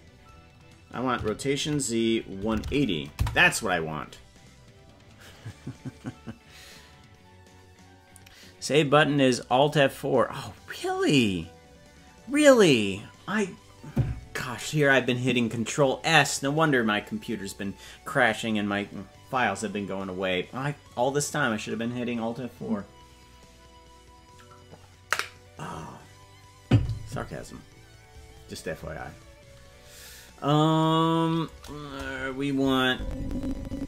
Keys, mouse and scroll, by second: 1.1 r, 31.8 KP_0, 32.8-33.8 drag.